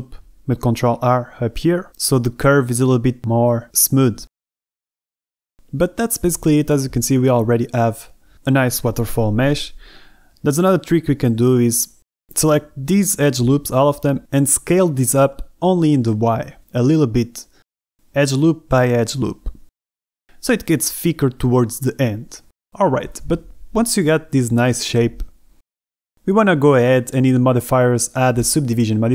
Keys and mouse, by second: 0.1 a, 0.3 b, 1.4 g, 1.5 g, 3.6 ctrl+r, 5.8 Escape, 6.2 g, 8.1 a, 8.3 Escape, 8.3 z, 8.3 b, 10.2 g, 10.5 x, 11.5-14.7 typing, 12.5 middle click, 13.0 middle click, 13.3 middle click, 15.8-20.4 typing, 16.5 click, 17.7 Escape, 19.2 click, 21.3 click, 22.0 Tab, 22.2 click, 22.6 middle click, 23.9-25.0 middle drag, 25.4 Tab, 26.0 Tab, 26.3 a.